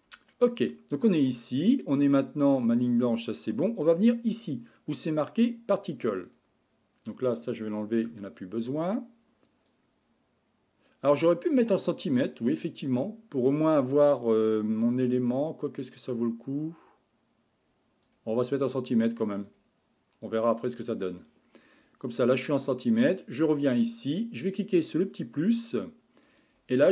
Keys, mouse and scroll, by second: 0.3-3.3 middle drag, 6.3 click, 8.0 n, 9.7-12.5 drag, 13.9-17.0 drag, 18.0-20.7 drag, 22.6-23.6 drag, 25.0-26.9 drag.